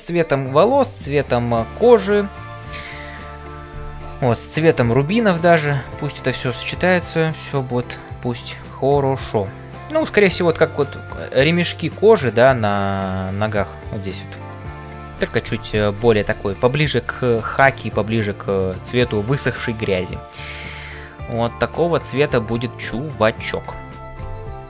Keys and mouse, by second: 1.9 middle click, 8.7-9.9 middle drag, 19.9 middle click.